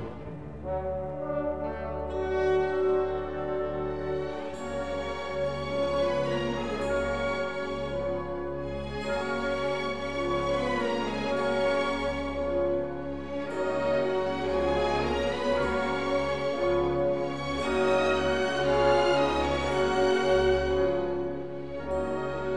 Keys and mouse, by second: 0.8 s, 1.4 click, 2.5-5.0 drag, 5.6 s, 6.1 click, 6.9-8.5 drag, 9.2 s, 9.7 click, 10.5-12.7 drag, 13.6 Tab, 14.8 ctrl+2, 15.5 Tab, 18.3 ctrl+r, 19.4 KP_Enter, 20.2 s, 21.0 y.